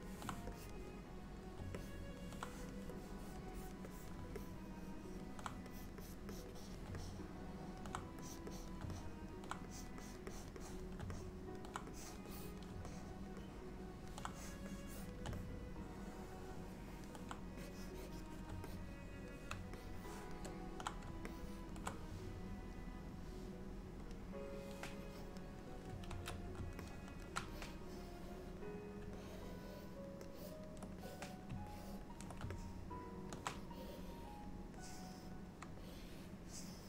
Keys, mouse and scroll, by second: 0.6 click, 1.8 middle click, 2.5 click, 3.0 click, 3.6 click, 4.0 click, 4.4 middle click, 5.8 click, 6.1 click, 6.4 click, 6.6 click, 7.1 middle click, 8.3 click, 8.6 click, 9.0 middle click, 9.8 click, 10.1 click, 10.4 click, 10.7 click, 11.2 middle click, 12.0 click, 12.3 click, 12.9 middle click, 13.5 middle click, 14.4 click, 14.9 click, 15.4 middle click, 17.7 click, 18.0 click, 18.7 middle click, 19.8 shift+middle click, 21.3 middle click, 24.4 click, 25.1 click, 26.3 ctrl+z, 26.9 middle click, 27.6 click, 29.3 ctrl+click, 30.4 ctrl+click, 31.1 click, 31.8 ctrl+click, 32.6 middle click, 33.8 click, 35.9 shift+click, 36.2 shift+click, 36.5 click.